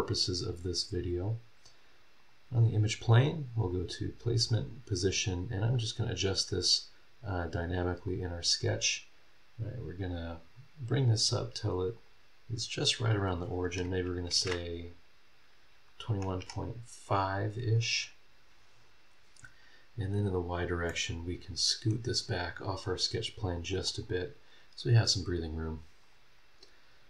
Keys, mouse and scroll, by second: 2.2 click, 3.6 click, 4.5 click, 6.1 click, 7.3 click, 8.1-11.5 drag, 11.6 click, 14.3 KP_2, 14.4 KP_1, 16.0 KP_Decimal, 16.4 KP_5, 20.2 click, 20.9 click, 21.0-22.1 middle drag, 22.8 click, 23.5 click, 26.0 click.